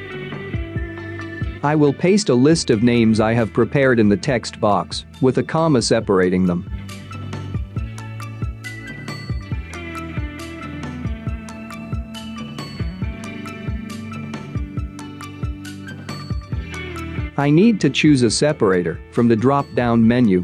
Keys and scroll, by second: 10.5 ctrl+c, 13.7 ctrl+v.